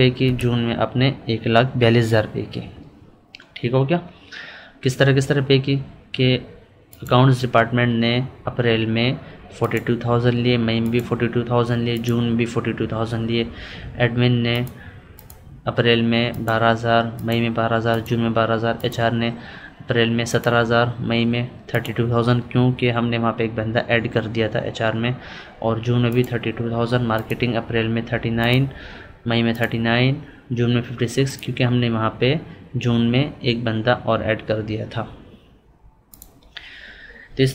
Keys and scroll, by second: 1.1 Right.